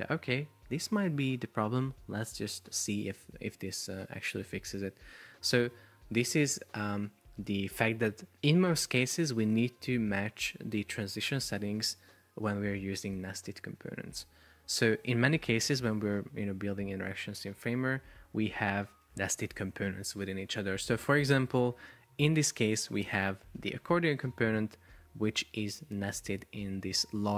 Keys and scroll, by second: 17.7 super+p, 23.8 shift+super+4, 25.7 space.